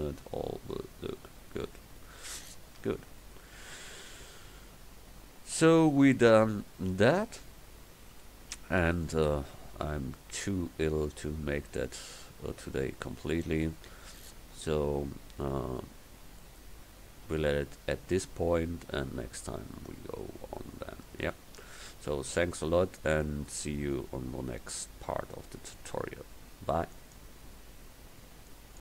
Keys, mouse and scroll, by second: 5.6 KP_1, 9.2 middle click, 17.9 middle click, 20.5-25.8 middle drag.